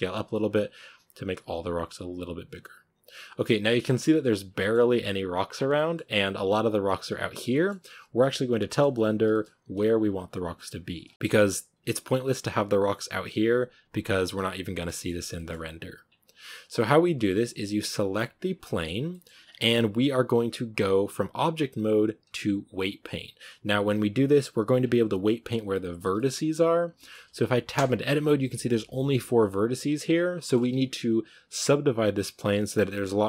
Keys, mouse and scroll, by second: 3.5 shift+middle drag, 3.7 scroll up 2, 4.4 shift+middle drag, 4.7-5.4 scroll up 2, 5.4 scroll down 7, 5.7-8.3 shift+middle drag, 8.3-9.2 scroll up 5, 8.5 shift+middle drag, 9.2-10.9 shift+middle drag, 10.9 scroll down 1, 11.1 shift+middle drag, 11.2-11.7 scroll up 3, 14.0-15.2 scroll down 5, 14.7-15.0 shift+middle drag, 15.2-15.9 shift+middle drag, 15.9-16.8 scroll down 1, 16.8-18.1 scroll down 1, 18.1 right drag, 18.3-19.4 scroll down 5, 18.5 middle drag, 19.0 middle click, 19.4-24.7 shift+middle drag, 24.7-26.0 scroll down 1, 26.0-26.6 shift+middle drag, 26.6 scroll down 1, 26.8-27.6 shift+middle drag, 27.6 Tab, 28.6 right click, 29.2 right drag, 29.4-30.0 scroll down 1, 30.0 right click, 30.2-30.6 shift+middle drag, 30.6 Tab, 32.3-33.2 scroll up 1.